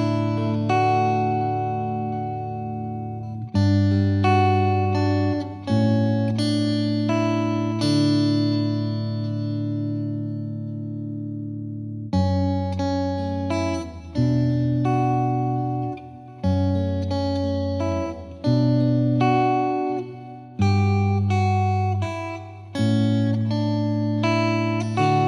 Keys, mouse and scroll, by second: 10.5 space, 11.0 ctrl+s, 12.3 click, 12.5 middle drag, 12.6 scroll down 3, 12.9 middle click, 13.5-14.1 scroll up 2, 13.7 shift+middle drag, 14.1 shift+middle click, 14.3 scroll down 1, 14.4 middle click, 14.7 ctrl+s, 14.9-15.3 shift+middle drag, 15.3 scroll down 1, 15.4 shift+middle click, 15.6-16.3 scroll up 2, 16.3 scroll up 1, 16.6 scroll down 1, 16.8 middle click, 17.4 click, 17.9-20.3 drag, 22.1-23.7 drag, 23.7 scroll down 3, 24.0 click, 24.4 KP_0, 24.8-25.2 scroll down 1, 25.2 ctrl+s.